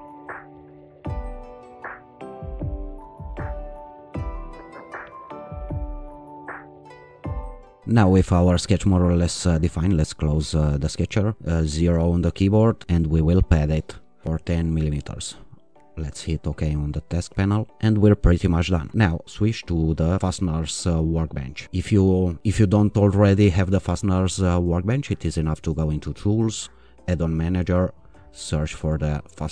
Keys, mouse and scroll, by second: 0.2 o, 0.4 click, 0.6 Escape, 1.3 click, 1.5 click, 1.7-3.5 typing, 2.0 click, 2.2 click, 2.5 click, 4.3 ctrl+r, 4.5 click, 4.8 click, 5.0-6.5 typing, 7.0 click, 9.7 click, 11.3 click, 11.7 0, 13.0 click, 15.8 click, 19.2 click, 20.9-21.6 drag, 25.8 click, 27.5 click, 29.3 scroll down 1.